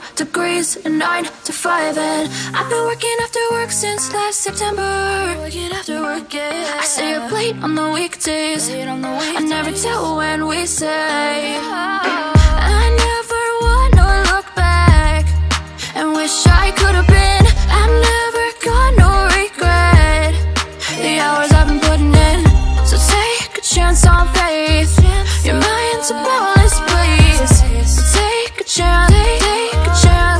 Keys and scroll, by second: 29.9 ctrl+t.